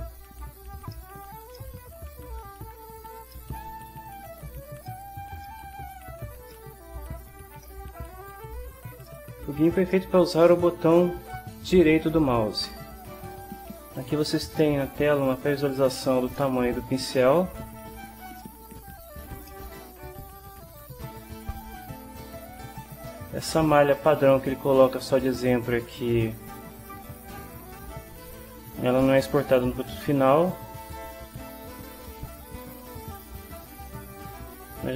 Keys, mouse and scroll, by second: 0.9 shift+middle click, 1.6 shift+middle click, 2.1-3.2 shift+middle drag, 3.3 ctrl+middle click, 4.0 ctrl+click, 4.8 ctrl+shift+click, 5.4 ctrl+shift+click, 7.6-8.7 shift+middle drag, 9.1 shift+middle click, 9.9 shift+middle click, 14.6 middle click, 16.3 ctrl+middle click, 18.4 ctrl+click, 19.5 ctrl+shift+middle click, 21.6-27.2 right drag, 32.8 right click, 34.0-34.9 right drag.